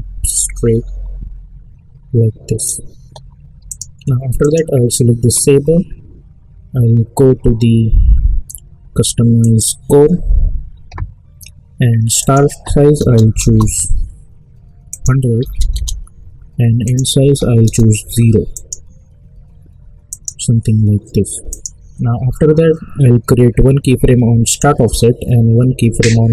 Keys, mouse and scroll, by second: 9.4 click, 12.2 click, 13.4 Return, 14.9 click, 24.4 click.